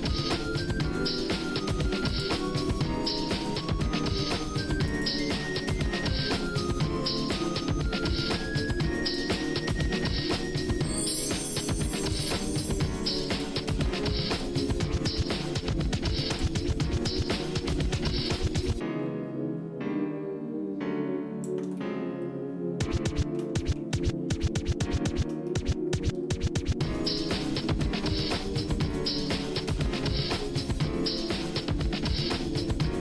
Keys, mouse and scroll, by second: 1.2 e, 2.4 middle click, 4.9 ctrl+right click, 5.7-7.4 drag, 9.2 ctrl+right click, 10.6-12.2 ctrl+drag, 13.2 ctrl+right click, 14.4-16.5 drag, 16.8 middle click, 17.2-17.9 scroll up 3, 18.2 click, 18.7-21.6 drag, 21.8-23.4 shift+middle drag, 23.6 middle click, 23.9-24.2 scroll down 2, 24.4 shift+middle click, 25.5 middle click, 26.6 shift+middle click, 27.1 middle click, 27.6-28.0 scroll down 2, 28.0 middle click, 28.9 shift+middle click, 29.5 scroll up 1, 30.1 middle click, 31.0 middle click, 31.6 shift+middle click, 32.3 middle click.